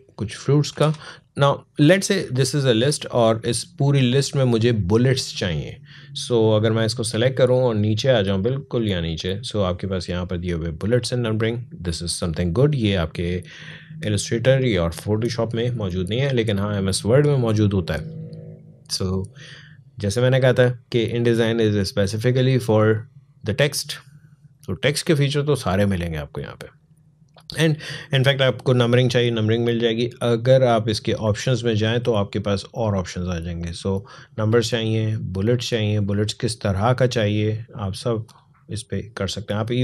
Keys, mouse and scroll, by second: 0.5 shift+b, 1.2-1.7 alt+scroll up 1, 2.0 space, 2.2 click, 2.5 space, 3.1-10.6 drag, 28.1 click, 30.7-33.9 drag.